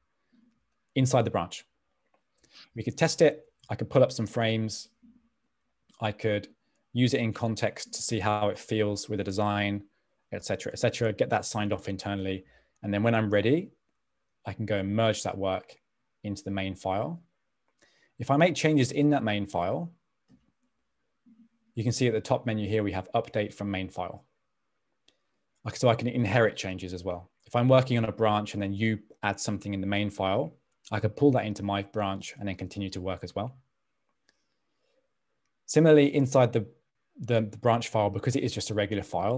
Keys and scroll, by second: 4.3 f.